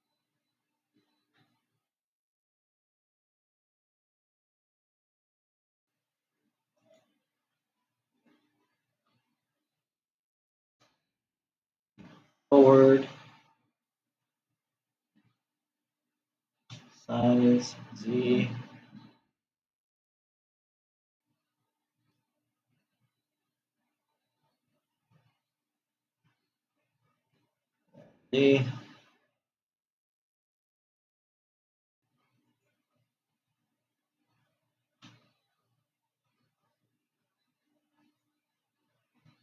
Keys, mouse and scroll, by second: 2.0 g, 9.5 g, 17.2 s, 22.1 scroll up 4, 23.5-27.0 middle drag, 28.0 g, 35.7 Tab, 36.7-38.9 middle drag, 38.9 click.